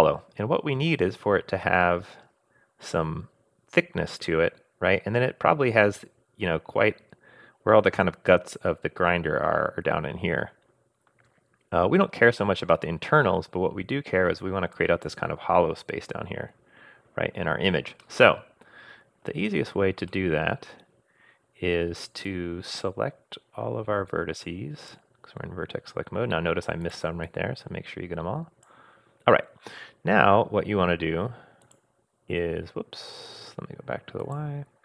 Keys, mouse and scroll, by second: 14.7 click, 18.0-19.3 middle drag, 19.3 scroll up 1, 20.1 middle click, 20.7 scroll up 1, 22.2-24.9 drag, 26.8 click, 27.2-28.7 drag, 31.6 click, 34.2 click.